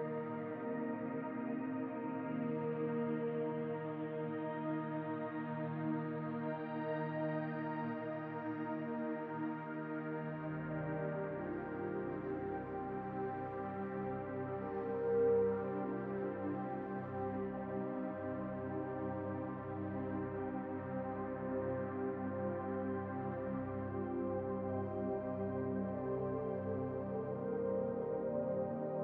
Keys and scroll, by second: 5.7-7.5 typing.